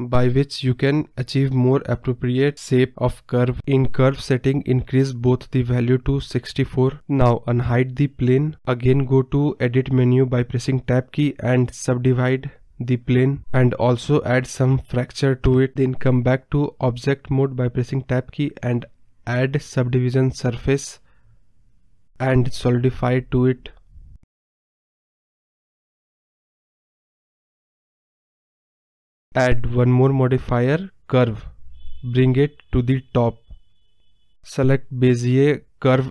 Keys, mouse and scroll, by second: 0.2 Tab, 1.8 click, 2.5-4.8 drag, 4.8-5.1 scroll up 2, 5.1-5.7 scroll down 4, 6.6 click, 7.3 click, 7.9-8.2 scroll up 2, 8.2 click, 9.1 Tab, 9.8-11.2 right drag, 11.2 scroll up 1, 11.2 middle click, 12.0-16.7 drag, 16.7 Tab, 17.2-19.0 right drag, 19.0 click, 21.3-22.3 drag, 23.3 click, 24.5 click, 24.6 scroll up 2, 24.7-25.4 middle drag, 25.7-26.2 middle drag, 26.2 click, 26.7 KP_0, 27.5 scroll down 1, 27.6-28.0 middle drag, 28.0 scroll up 2, 28.0 middle drag, 28.2 scroll down 3, 30.2 click, 30.7 scroll down 3, 31.0-31.5 scroll up 1, 31.5-33.2 drag, 35.1-36.1 drag.